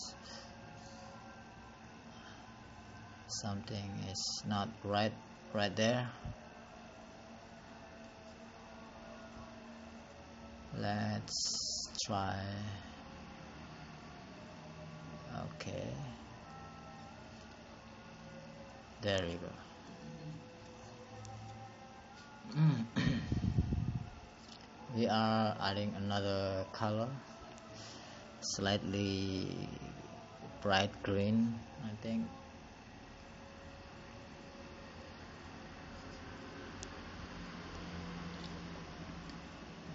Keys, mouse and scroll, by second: 21.1 click, 22.8 click, 28.3 click, 29.4 click, 30.4 click, 33.9 click.